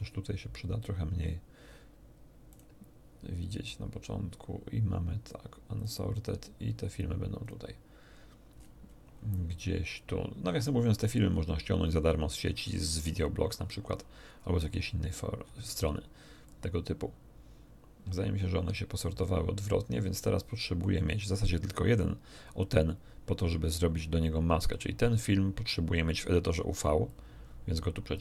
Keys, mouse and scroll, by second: 2.5 click, 3.6-5.4 drag, 5.8 click, 7.4 click, 8.5-9.0 scroll up 2, 9.0 scroll down 1, 9.8 scroll down 1, 10.5-11.1 scroll down 2, 11.6 scroll down 2, 12.3-14.9 scroll down 12, 15.4 scroll down 2, 16.4-21.0 drag, 24.7-26.7 drag, 27.0-28.2 drag.